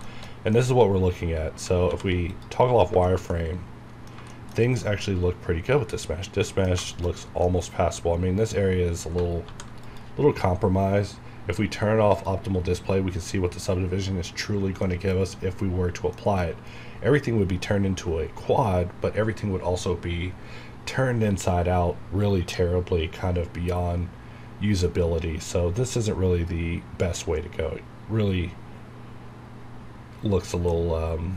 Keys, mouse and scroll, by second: 0.0-1.9 shift+middle drag, 1.9 alt+v, 2.3 click, 2.7 scroll down 1, 3.1 shift+middle click, 3.2 shift+scroll down 1, 3.3-6.9 middle drag, 7.1 scroll up 1, 7.4 scroll down 1, 7.7 scroll up 1, 14.5 scroll down 1, 14.8 middle click, 16.4 scroll up 1, 30.3 scroll down 1, 30.7 middle click.